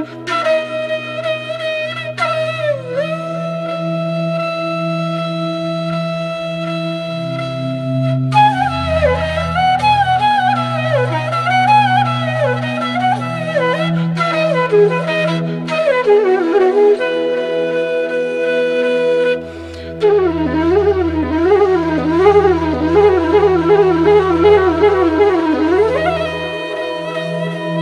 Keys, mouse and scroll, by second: 1.8 space, 2.4 ctrl+v, 3.0 ctrl+a, 4.2-5.2 typing, 6.7 Return, 7.4-10.8 drag, 10.8-25.1 drag, 25.1 click, 27.0-27.8 alt+drag.